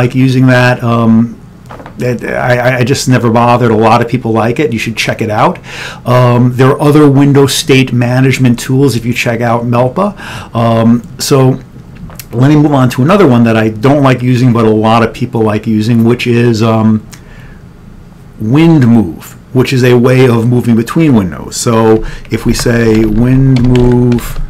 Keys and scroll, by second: 22.1 Return, 22.5-24.4 typing.